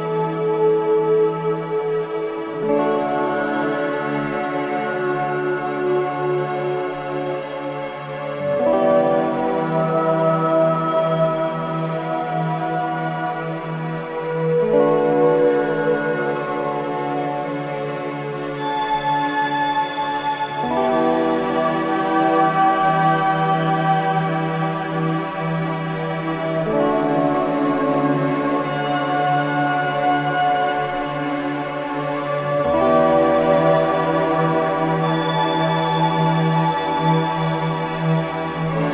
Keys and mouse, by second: 3.2 shift+a, 9.3 e, 11.4 click, 13.7 e, 16.5 click, 17.7 e, 21.7 e, 23.7 click, 24.7 e, 27.7 e, 29.5 click, 30.3 g, 32.5 click, 33.4 shift+click, 35.9 ctrl+shift+b.